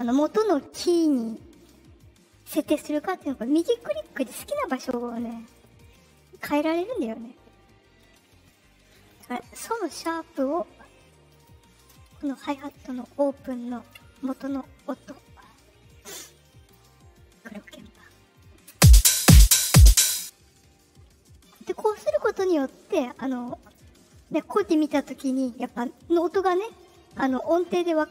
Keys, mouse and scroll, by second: 3.2 right click, 3.6 right click, 3.9 right click, 4.1 right click, 4.4 right click, 4.7 right click, 5.1 right click, 5.5 right click, 5.7 right click, 5.9 right click, 6.3 right click, 6.7 right click, 6.9 right click, 11.2 click, 12.5 click, 13.4 ctrl+click, 14.3-16.6 drag, 18.6 space, 20.0 space, 23.6 click.